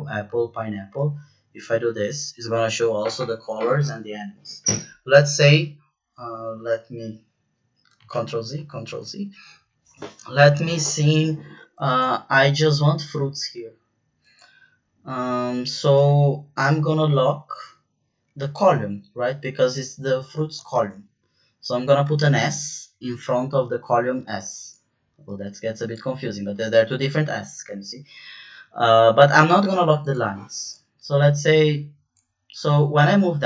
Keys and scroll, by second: 8.1 ctrl+z, 8.5 ctrl+z, 20.7 shift+4.